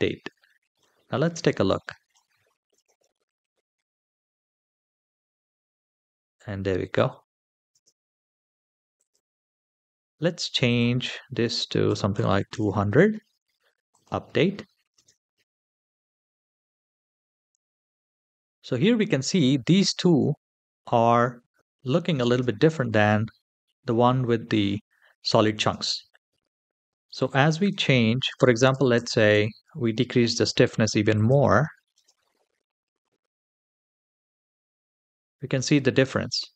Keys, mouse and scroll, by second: 0.2-0.6 shift+middle drag, 0.8-1.2 scroll down 2, 1.3-1.9 shift+middle drag, 2.5 space, 7.6 space, 8.7 click, 10.4-12.3 drag, 12.1 KP_0, 13.7 click, 14.8 space, 21.4 space, 21.6 click, 22.1 space, 25.4 space, 27.4-29.1 drag, 28.8 KP_0, 30.9 click, 31.7 space.